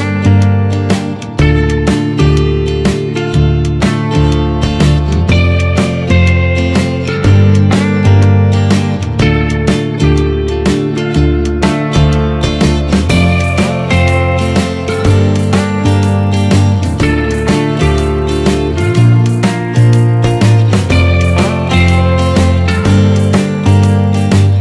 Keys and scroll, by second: 8.9 ctrl+z, 15.5 ctrl+=.